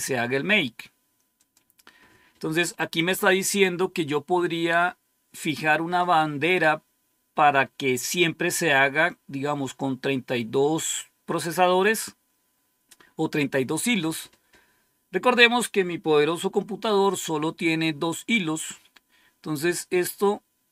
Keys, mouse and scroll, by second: 1.3 click, 1.7 click, 18.8-20.2 scroll down 2, 20.2-20.7 scroll up 2.